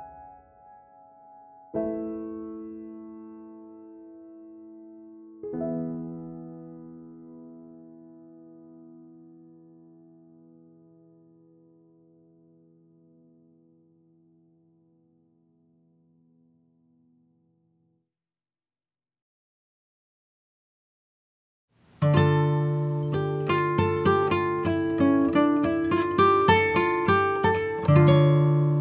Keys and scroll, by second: 21.0 ctrl+z.